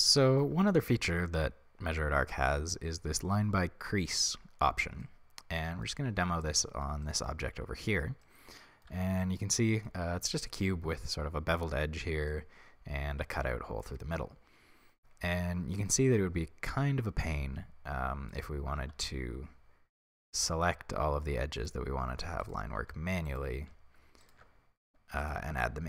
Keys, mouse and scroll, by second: 7.5-7.8 scroll up 2, 9.0 Tab, 12.8 middle click, 13.7-16.3 middle drag, 17.0-18.4 middle drag, 18.4 alt+right click, 20.1 click, 21.6-22.6 alt+right drag, 23.4-24.4 alt+right drag, 24.7-25.3 scroll down 1, 25.3 alt+shift+right click, 25.6-25.8 middle drag.